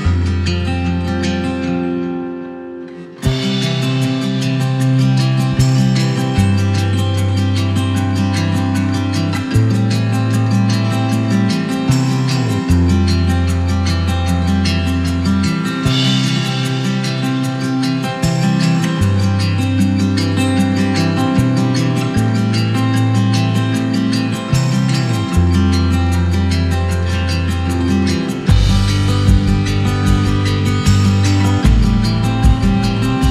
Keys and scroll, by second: 0.5 Up, 2.5 Down, 27.9 shift+super+[, 28.7 shift+super+[, 30.6 shift+super+g, 31.3 super+g.